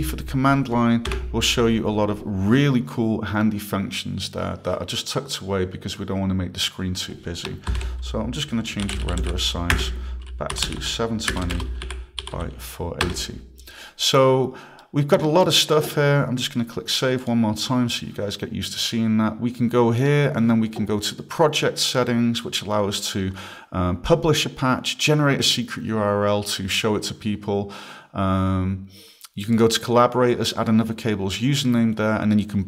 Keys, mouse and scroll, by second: 1.1 BackSpace, 2.0-2.4 scroll, 3.4 scroll, 6.6 click, 7.7 ctrl+p, 8.5-13.0 typing, 13.0 Return, 14.8 right click, 17.2 click, 20.0 click.